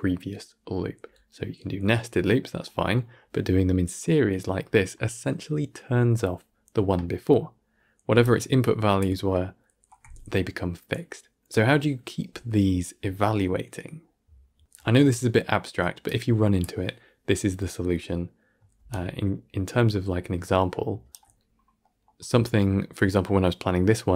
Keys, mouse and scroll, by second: 18.8-24.1 right drag.